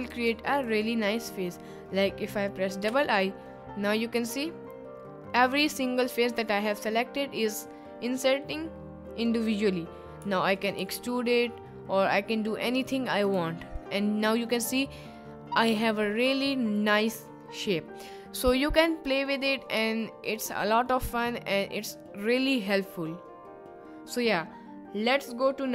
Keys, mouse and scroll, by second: 1.0 middle click, 2.2 middle click, 5.4 click, 6.2 middle click, 6.7 middle click, 7.5 middle click, 10.2 e, 10.8 s, 13.1 click, 13.3 Tab, 13.8-14.1 middle drag, 14.3 middle click, 15.0-15.9 middle drag, 18.6-19.2 middle drag, 19.7 middle click, 20.4 middle click.